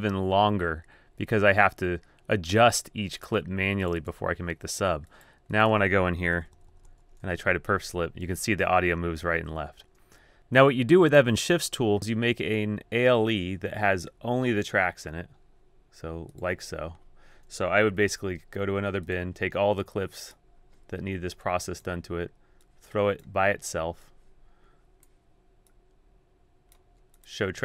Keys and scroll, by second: 6.3 super+], 6.6 super+], 6.7 super+], 6.9 super+], 7.6-9.7 typing, 18.0 super+n, 20.4 super+n.